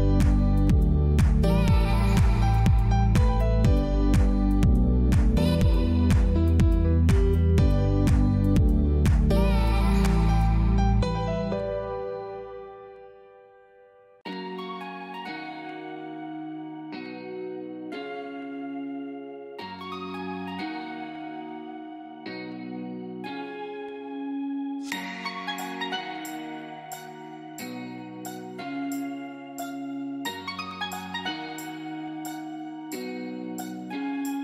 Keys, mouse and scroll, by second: 3.2 click, 7.5 click, 12.5 z, 12.8 click, 13.6-16.2 typing, 13.8 click, 14.3 click, 14.6 click, 15.6 click, 15.9 click, 19.7 click, 22.3 ctrl+shift+a, 25.5 j.